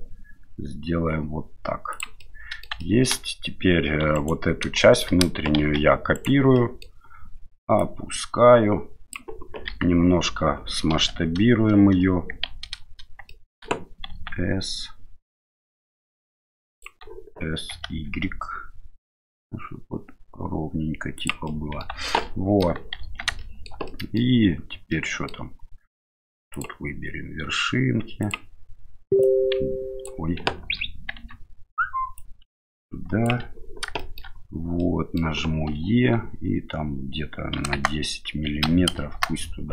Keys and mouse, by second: 2.3 middle click, 2.9 shift+middle click, 4.0 3, 4.2 right click, 4.8 shift+middle click, 5.6 shift+d, 6.6 middle click, 7.9-9.2 drag, 9.7 KP_1, 10.9 KP_7, 12.5 shift+z, 13.4 shift+middle click, 14.1 s, 17.7 s, 21.5 middle click, 21.9 Tab, 22.2-22.6 middle drag, 23.0 shift+z, 23.4 shift+middle click, 23.9-24.2 middle drag, 24.9-25.3 middle drag, 26.6-28.5 drag, 29.2-30.1 drag, 30.6 ctrl+z, 31.2 Tab, 32.2-33.3 drag, 34.0 middle click, 34.9 middle click, 35.7 e.